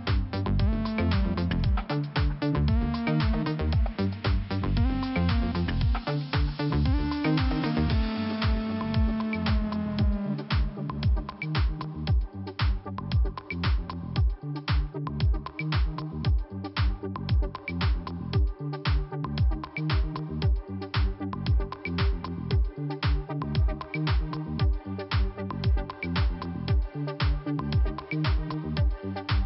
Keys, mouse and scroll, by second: 3.3 click, 3.4 click, 4.4 scroll down 1, 6.4 click, 7.3 scroll up 1, 8.4 click, 8.4 click, 9.1 click, 9.2 click, 10.7 click, 10.8 click, 11.1 click, 11.2 click, 12.5 click, 17.3 click, 19.4-19.7 scroll down 2, 20.1 scroll up 1, 23.0 click, 25.2 click, 25.3 click, 26.8 click, 29.1 click.